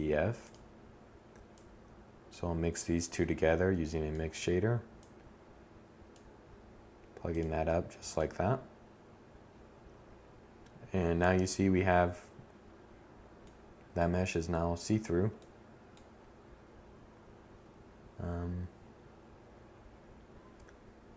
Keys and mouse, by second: 16.4-21.1 middle drag.